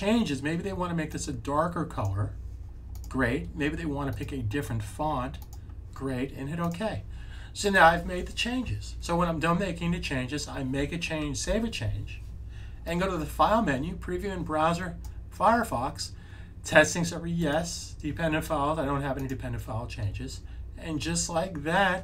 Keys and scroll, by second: 11.4 super+s.